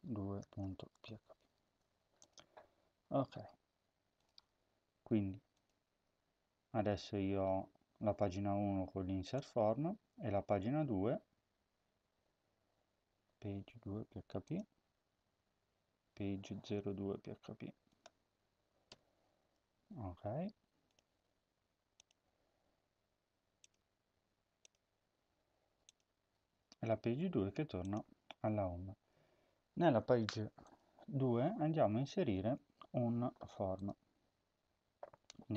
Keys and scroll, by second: 0.1-1.4 typing, 1.4 ctrl+s, 18.7 0, 19.5 ctrl+s.